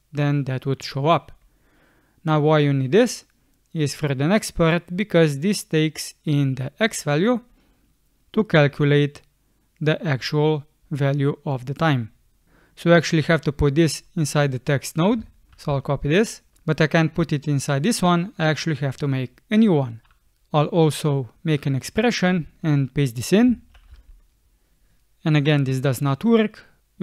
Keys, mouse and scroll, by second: 15.5 ctrl+c, 23.7 ctrl+v.